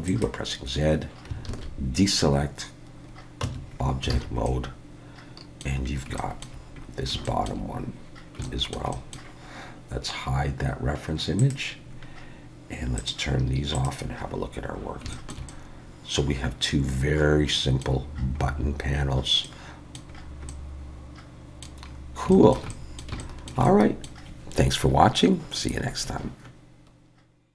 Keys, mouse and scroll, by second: 1.5 alt+a, 2.1-3.4 scroll down 3, 3.4 Tab, 3.7-4.1 scroll down 3, 4.1 alt+a, 4.5 middle click, 5.8-6.2 scroll down 2, 6.2 shift+middle click, 6.8-7.1 scroll up 4, 7.3 shift+middle click, 8.0 scroll down 2, 8.4 shift+middle click, 8.9 middle click, 11.4 click, 11.9-13.0 scroll down 2, 13.0 click, 13.7 click, 14.2 scroll up 3, 14.7 scroll down 2, 15.1 shift+middle click, 15.5 middle click, 18.4 scroll up 2, 19.0-19.4 scroll down 2, 19.4 middle click, 20.1-20.5 scroll down 2, 20.5 middle click, 21.9-22.3 scroll up 3, 22.3 shift+middle click, 22.7 middle click, 23.2 shift+middle click, 23.6 middle click.